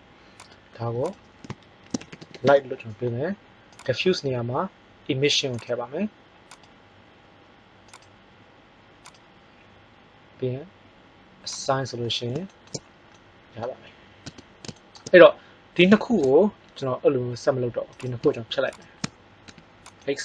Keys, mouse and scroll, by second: 6.5-8.8 drag, 11.6 click, 12.6 middle click, 13.1 middle click, 14.2 Tab, 17.9 right click, 19.4 x.